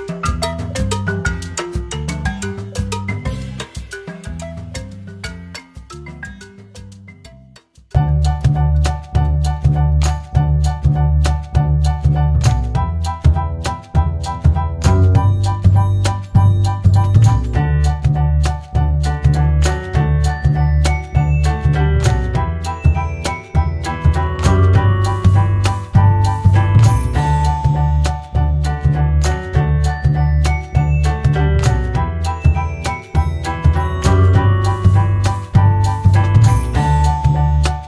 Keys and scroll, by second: 2.2 ctrl+c, 2.3 ctrl+v, 16.4 BackSpace, 22.9 ctrl+c, 23.1 ctrl+v, 27.5 ctrl+v.